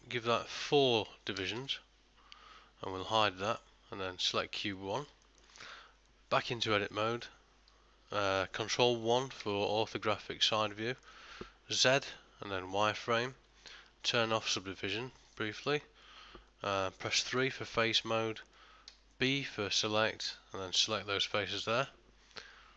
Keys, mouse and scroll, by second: 0.4 click, 3.5 click, 5.3 ctrl+middle click, 6.1 Tab, 6.8 middle click, 9.5 ctrl+KP_1, 10.8 ctrl+middle click, 11.8 z, 15.4 click, 17.5 3.